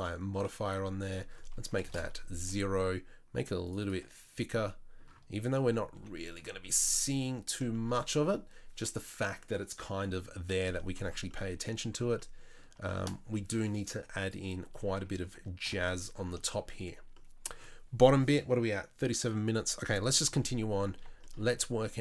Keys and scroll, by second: 6.0 z, 14.8 Tab, 15.3 Tab, 15.7 KP_7, 20.4 KP_3.